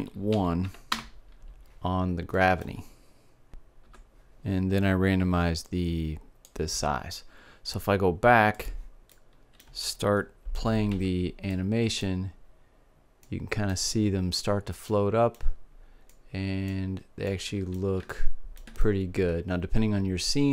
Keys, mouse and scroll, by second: 2.9-4.4 middle drag, 6.2-8.1 drag, 9.2 click, 9.9-11.2 middle drag, 11.5 alt+a, 15.7 middle click, 17.1-18.2 middle drag, 19.4-20.5 middle drag.